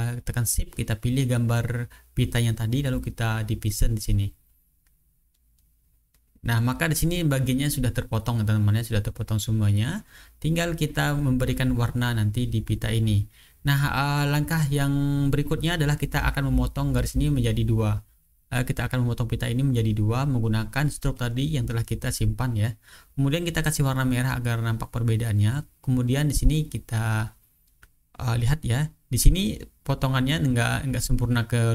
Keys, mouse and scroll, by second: 1.5 shift+click, 3.2 click, 4.8 click, 5.8 click, 6.5 click, 6.9-7.7 drag, 8.0 ctrl+z, 8.1 ctrl+click, 8.6-9.2 ctrl+drag, 9.8 ctrl+z, 9.8 ctrl+click, 10.2-10.9 ctrl+drag, 11.9 click, 12.4 ctrl+scroll down 2, 12.7 ctrl+scroll up 2, 13.7-14.4 ctrl+scroll down 1, 14.4-14.9 ctrl+scroll up 1, 15.8-16.3 ctrl+scroll down 1, 17.1 click, 17.5-20.3 drag, 22.2 shift+click, 22.7 shift+click, 23.3-23.9 ctrl+scroll down 2, 25.0-25.6 ctrl+scroll up 2, 25.8 ctrl+click, 26.5-27.1 ctrl+scroll down 2, 27.5-28.0 ctrl+scroll up 2, 29.8 click.